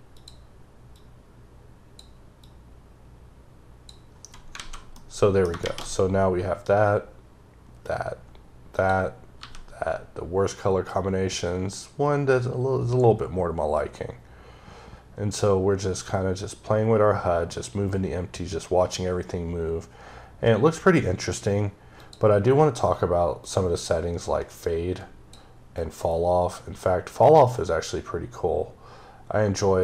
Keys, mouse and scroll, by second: 0.0 click, 0.8 click, 2.3 click, 4.4 a, 4.8 middle click, 7.7-8.3 scroll down 2, 8.6 click, 9.2 g, 21.9 click, 23.3 click, 25.6 click.